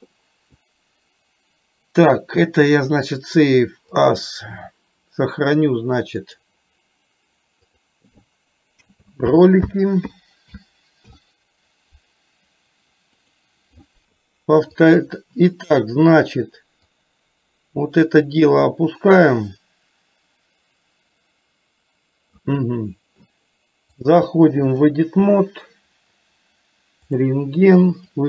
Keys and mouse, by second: 14.2 KP_3, 14.9 click, 16.9-22.6 drag, 24.2 click.